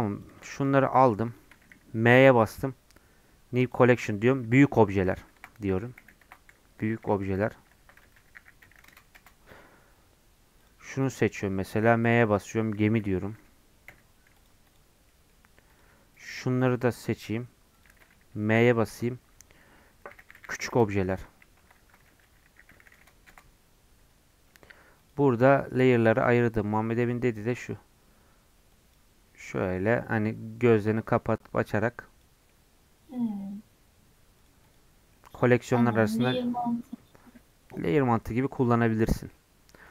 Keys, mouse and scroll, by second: 0.2-2.1 drag, 2.1 m, 9.2 Return, 10.6-12.0 drag, 12.0 m, 15.1 middle click, 15.3 scroll up 2, 15.7-18.5 drag, 18.6 m, 20.4 u, 23.3 Return, 25.0-29.4 drag, 29.4-30.7 middle drag, 30.7-32.5 drag, 32.5 middle click, 33.3 scroll up 1, 34.4 click, 35.1 middle click, 35.3 scroll down 2, 39.8-39.9 drag.